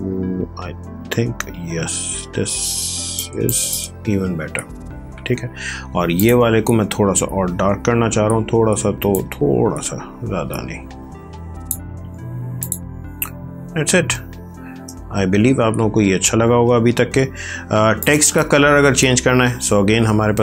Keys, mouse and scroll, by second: 6.2 click.